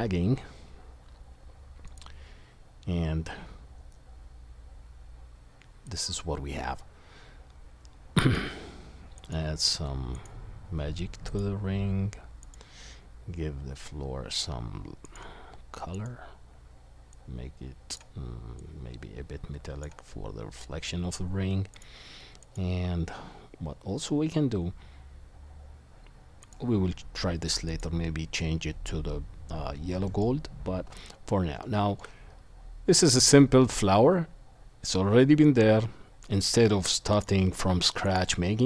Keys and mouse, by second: 22.6-26.5 drag, 27.8 click, 27.9-31.0 middle drag, 31.0-32.1 drag, 32.1-38.1 middle drag, 38.1-38.6 drag.